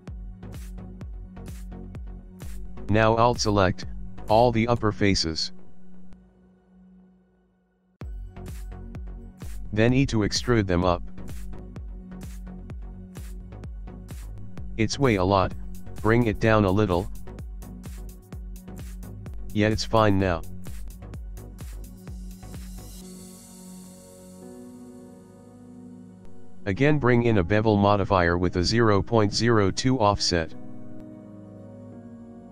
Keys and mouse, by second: 0.6 shift+middle click, 1.5 click, 2.9 alt+click, 4.2 middle click, 4.4 middle click, 6.4 KP_1, 7.4 ctrl+middle click, 8.1 ctrl+middle click, 8.3 ctrl+middle click, 9.5 e, 14.4 middle click, 16.1 g, 19.5 click, 19.6 middle click, 20.4 ctrl+middle click, 21.2 middle click, 22.1 Tab, 22.5 middle click, 23.1 ctrl+middle click, 23.9 shift+middle click, 24.7 middle click, 27.0 click, 30.1 click.